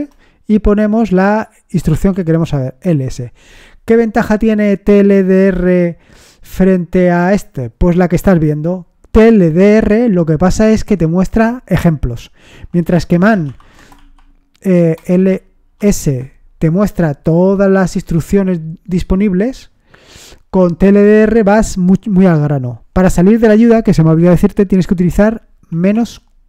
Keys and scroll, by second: 0.0-0.1 typing, 1.5-2.4 typing, 12.8-15.7 typing, 15.9 Return, 18.0 Page_Down, 18.3 Page_Down, 18.6 Page_Down, 18.8 Page_Down, 24.8 typing.